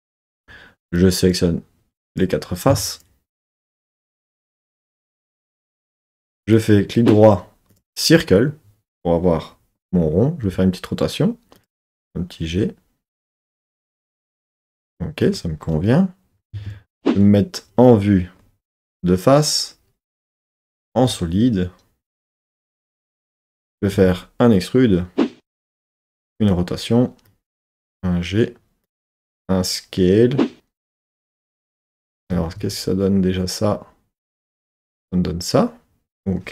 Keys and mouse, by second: 0.3 3, 0.9 click, 2.2 click, 2.9 shift+click, 3.8 shift+click, 4.5 shift+click, 5.3 shift+click, 6.5 right click, 11.5 click, 11.8 g, 13.1 click, 16.5 KP_3, 17.0 KP_1, 22.5 z, 24.0 e, 25.6 click, 26.3 r, 27.3 click, 27.7 g, 28.9 click, 29.1 s, 30.9-31.9 drag, 32.3 z.